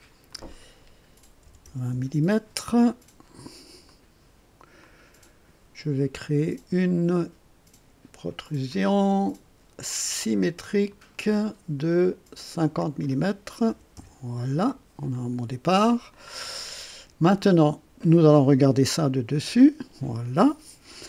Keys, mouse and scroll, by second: 0.3 click, 1.4 KP_2, 1.6 KP_0, 1.9 KP_Enter, 3.8 click, 4.8-5.7 drag, 8.7 click, 10.9 click, 12.6 click, 13.7 5, 13.9 Return, 15.1 click, 16.1-17.5 drag, 19.3 2.